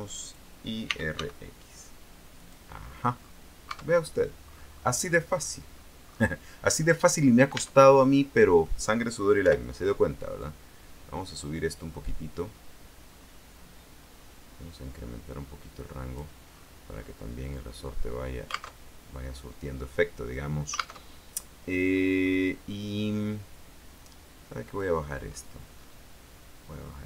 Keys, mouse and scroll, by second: 0.3 click, 0.8-1.8 typing, 2.5 click, 3.3-3.6 scroll down 2, 3.9 Tab, 4.6-5.3 scroll up 2, 5.4-6.1 scroll down 2, 6.3-6.7 scroll up 2, 7.7 Tab, 9.5 o, 10.5-13.3 drag, 13.3-15.1 scroll down 3, 16.7-17.5 scroll down 2, 18.0 scroll up 1, 18.9 alt+Tab, 21.2 alt+Tab, 22.0-22.7 scroll up 2, 22.8 scroll up 2, 24.9 click, 25.4-26.2 scroll up 4, 26.7-27.0 scroll up 2.